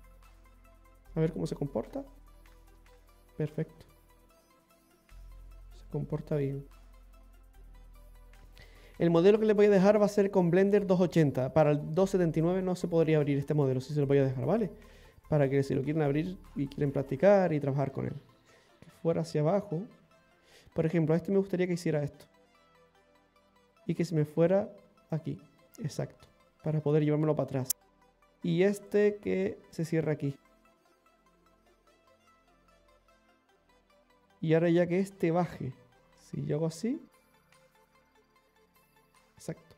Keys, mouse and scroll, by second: 0.0 middle click, 1.7 click, 2.2 click, 2.7-3.0 scroll down 2, 3.0 middle click, 7.4-8.2 scroll up 4, 8.0 middle click, 8.3 click, 8.3 scroll down 2, 8.5 middle click, 13.8 scroll down 1, 14.3 middle click, 17.2 scroll up 2, 17.5-17.8 scroll down 3, 17.9 middle click, 21.3 click, 24.0 click, 25.7 click, 27.4 middle click, 28.8 right click, 29.4 shift+right click, 29.7 shift+right click, 30.5 right click, 31.2 right click, 31.7 shift+right click, 32.6 f, 33.0-33.5 scroll down 2, 33.3 middle click, 38.6 click.